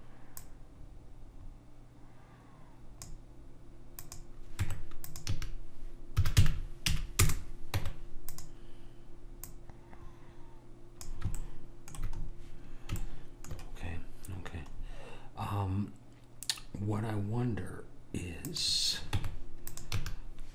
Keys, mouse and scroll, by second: 0.5 click, 4.1 click, 4.8 Tab, 5.5 a, 6.3 s, 8.0 Tab, 9.6 click, 11.5-14.9 middle drag, 14.9-15.8 scroll up 1, 15.8-18.6 scroll up 1, 18.6 click, 19.3 Tab, 20.1 a.